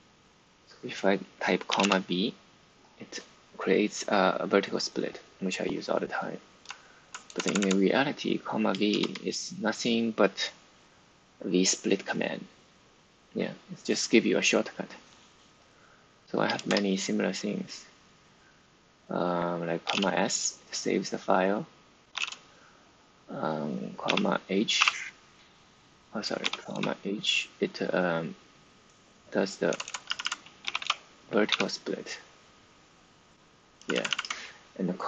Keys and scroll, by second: 1.4-2.2 typing, 6.6-7.5 typing, 8.8 shift+v, 16.5 shift+v, 19.5-20.3 typing, 21.6-22.6 typing, 24.0 ,, 24.7 m, 26.1-27.1 typing, 29.4-31.4 typing, 33.7-35.0 typing.